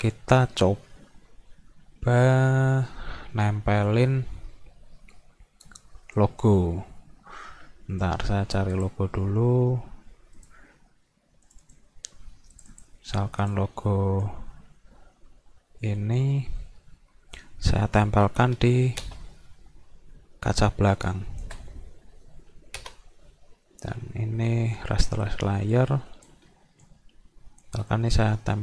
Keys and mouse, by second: 6.2 click, 7.9 right click, 8.7 click, 10.4 click, 11.5 click, 11.6 click, 12.6 click, 12.7 click, 13.4-17.4 drag, 20.6 shift+click, 23.8 right click, 24.9 click, 25.7 click, 26.9 shift+click, 27.9-28.6 drag.